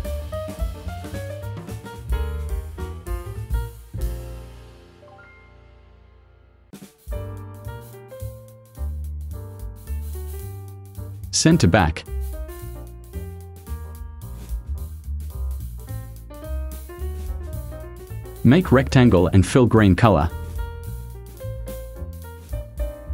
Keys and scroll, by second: 14.8 v.